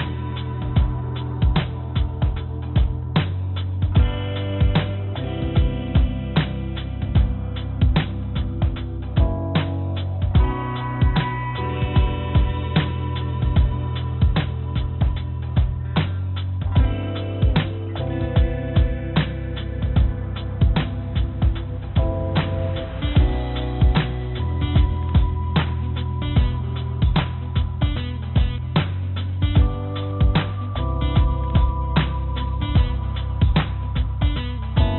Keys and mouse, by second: 2.1 click, 3.2 click, 4.2 shift+click, 5.3 j, 5.9 click, 6.7-9.3 drag, 10.0 click, 11.5 shift+click, 12.1 shift+click, 13.3 shift+click, 14.3 click, 15.7 g, 18.3-20.4 drag, 21.3-22.5 drag, 25.8-26.8 drag, 28.4 ctrl+z, 30.1 g, 33.0 g.